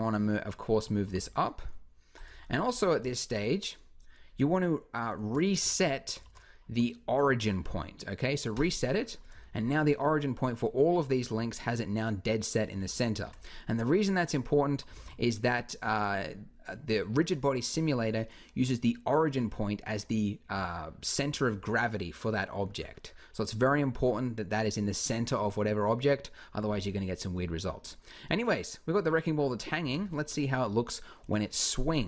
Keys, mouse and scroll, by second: 0.8 g, 14.8 alt+a, 22.6-24.9 middle drag, 27.2 middle click, 29.3-31.0 middle drag, 29.6 Escape, 31.0 KP_1.